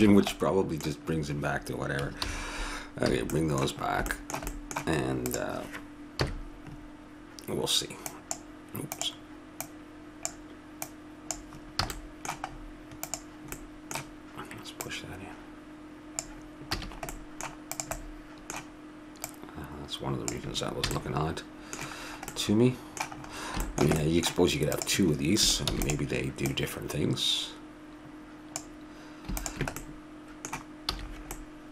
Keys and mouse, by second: 0.0 a, 0.2 middle click, 2.2 alt+h, 3.1 a, 5.3 click, 5.3 right click, 6.2 KP_3, 6.5 click, 8.1-12.7 drag, 11.8 a, 12.7 middle click, 13.0-16.7 drag, 16.8 a, 17.2 middle click, 17.7-19.9 right drag, 19.9-21.0 drag, 20.9 a, 21.0-23.0 middle drag, 24.7 click, 25.7 shift+d, 26.8-28.2 drag, 29.3-31.2 drag, 30.9 a.